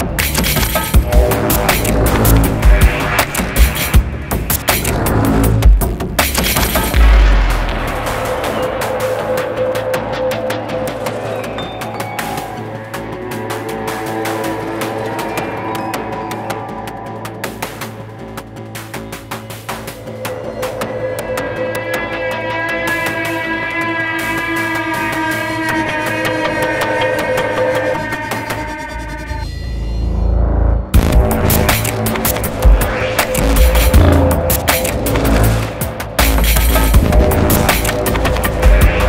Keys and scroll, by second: 20.1-22.7 typing, 22.7 Return.